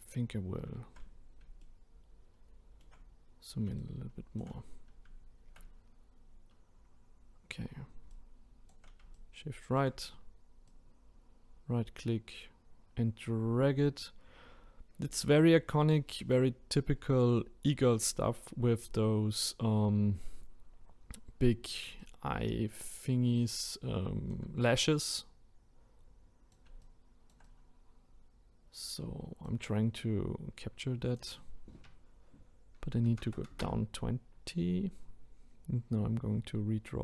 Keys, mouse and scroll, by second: 1.6-3.7 shift+middle drag, 3.7-30.4 shift+right drag, 31.2-34.2 drag.